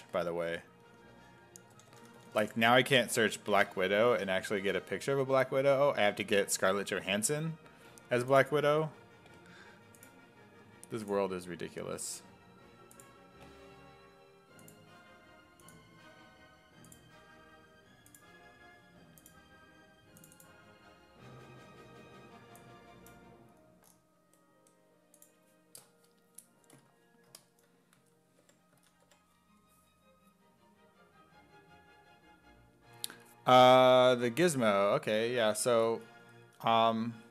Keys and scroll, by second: 1.4-2.8 typing, 27.8-29.6 typing, 34.8 w.